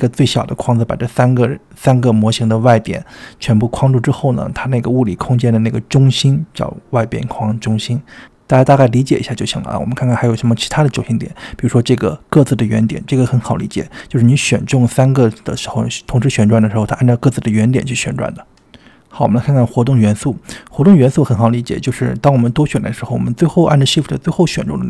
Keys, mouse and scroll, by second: 12.0-13.0 drag, 13.7 r, 18.8-19.7 drag, 23.2 click, 23.7 click, 24.5 shift+drag.